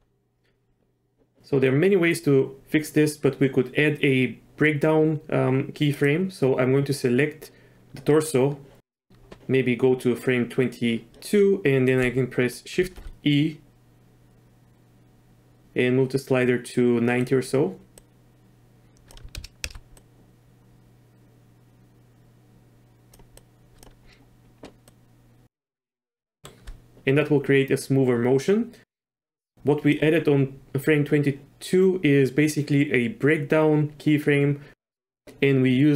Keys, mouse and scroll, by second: 5.9 click, 12.8 shift+e, 18.0-19.1 drag, 19.3 shift+space, 19.6 shift+space, 19.9-23.1 drag, 23.4-23.8 drag, 24.9-25.4 drag, 26.3 shift+middle drag, 29.5 click, 35.2 drag.